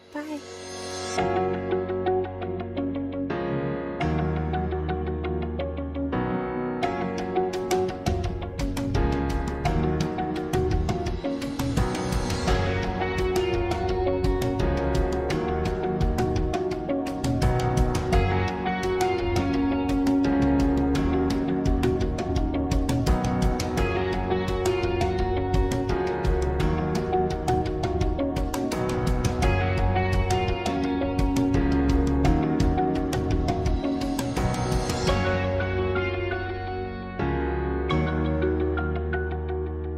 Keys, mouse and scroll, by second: 0.9 click, 1.5 click, 1.6 click, 1.6 middle click, 1.7 scroll down 2, 1.7 middle click, 1.8 click, 1.8-3.0 typing, 3.4 Tab, 3.5 click, 3.7 middle click, 3.7 scroll down 2, 3.8 Delete, 4.5 click, 4.7 Tab, 4.8 g, 5.1 right click, 5.2 Tab, 5.3 ctrl+r, 6.0 3, 6.3 shift+click, 6.7 shift+click, 6.8 shift+click, 7.1 shift+d, 7.4 p, 7.6 p, 7.8 Tab, 7.8 middle click, 7.9 click, 8.1 click, 8.4 g, 8.9 click, 9.8 middle click, 9.8 scroll up 4, 10.0 middle click, 10.7 click, 11.3 click, 11.4 click, 11.9 click, 12.3 drag, 12.5 click, 12.6 click, 13.4 scroll down 2, 13.6 scroll up 1, 13.7 shift+a, 14.3 ctrl+alt+KP_0, 14.5 click, 14.8 n, 14.8 click, 15.2 F3, 15.8 shift+a, 15.9 middle click, 16.0 scroll down 4, 16.1 click, 16.1 scroll up 5, 16.3 middle click, 16.4 shift+a, 20.5 click, 20.6 g, 21.9 click, 23.0 click, 24.0 click, 24.1 click, 24.8 click, 25.0 KP_0, 25.1 KP_0, 25.5 middle click, 25.5 scroll down 3, 25.8 shift+middle click, 25.9 shift+d, 26.9 click, 27.1 click, 27.4 KP_0, 27.5 click, 28.5 click, 29.2 click, 30.5 click, 31.3 click, 31.3 KP_0, 31.5 KP_0, 32.0 shift+middle click, 32.0 scroll up 1, 33.6 ctrl+s, 34.5 click, 34.8 click, 36.5 click, 37.9 click, 38.7 click, 38.8 click.